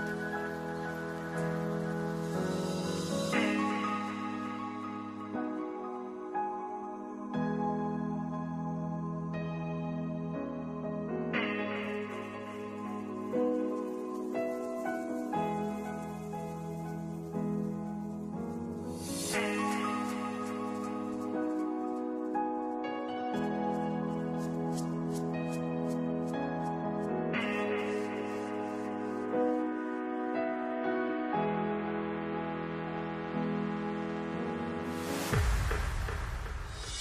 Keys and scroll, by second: 2.3 6, 5.8 ctrl+c, 8.4 ctrl+v, 10.9 ctrl+v, 17.3 ctrl+s, 18.4 space, 28.5 ctrl+s, 34.3 ctrl+s.